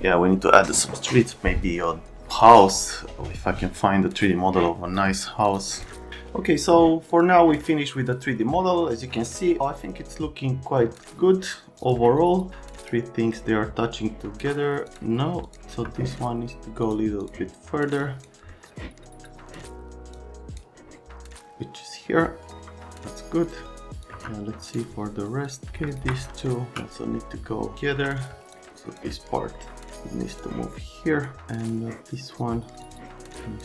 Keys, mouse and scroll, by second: 5.5 click, 7.1 click, 8.0 click, 9.2 click, 10.0 click, 11.8 click, 12.8 middle click, 15.4 click, 15.7 F3, 16.8 click, 17.2 click, 18.0 click, 18.5 middle click, 20.2 click, 23.4 right click, 24.0 right click, 24.1 click, 24.1 F3, 25.5 middle click, 25.9 ctrl+click, 26.3 right click, 27.0 right click, 27.9 F3, 28.3 F3, 28.5 click, 29.5 right click, 30.4 click, 31.6 click, 32.8 click, 33.3 click.